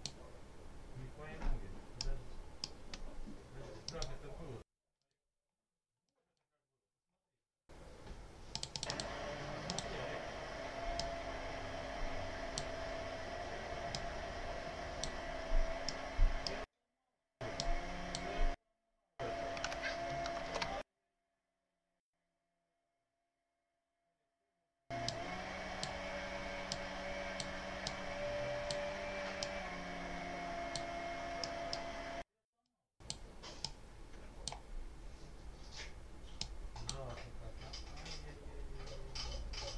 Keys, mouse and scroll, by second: 1.9 click, 3.7 right click, 4.9 click, 5.9 click, 8.4-9.1 drag, 9.5 click, 10.9-12.7 drag, 13.8-15.1 drag, 15.7 middle click, 17.5 click, 20.1 alt+2, 20.3 alt+3, 24.9 click, 26.6 click, 27.7 click, 29.3-30.8 drag, 31.3 middle click, 32.5 click, 33.5 click, 36.3 click.